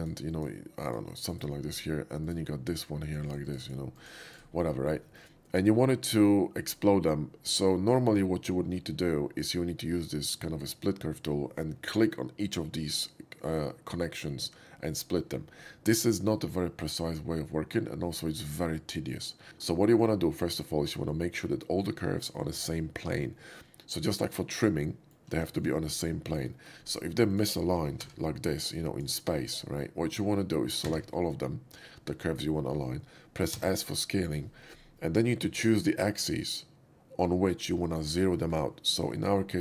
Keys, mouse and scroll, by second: 0.4 shift+click, 0.9 drag, 1.1 click, 1.4-2.3 right drag, 2.3 click, 2.8 click, 3.1 drag, 3.3 drag, 3.5 drag, 3.7 click, 4.0 click, 4.4-4.9 right drag, 4.9 scroll down 2, 5.2 shift+middle click, 19.4 middle click, 24.9 alt+middle click, 25.5 shift+middle click, 26.4 shift+middle click, 26.5 shift+middle drag, 26.9 scroll down 1, 27.3 shift+click, 27.9 g, 28.7-29.0 drag, 29.1 right click, 29.5-30.3 middle drag, 30.9 a, 33.5 a, 33.7 s, 36.1 s.